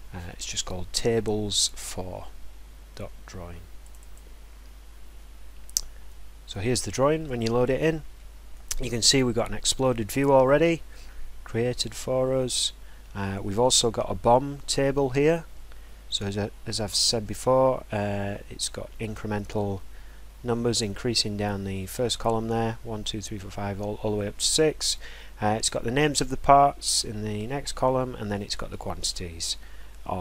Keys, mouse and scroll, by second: 3.9 click, 4.2 click, 6.7 middle click, 8.8 middle click, 10.0-11.3 scroll, 11.7 scroll.